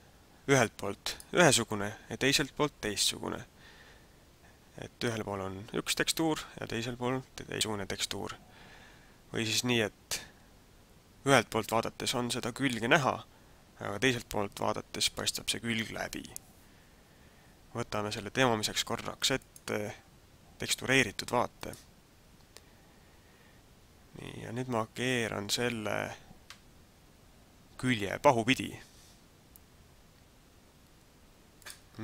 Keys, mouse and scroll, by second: 1.1 right click, 11.8 middle click, 19.5 click, 31.6 click.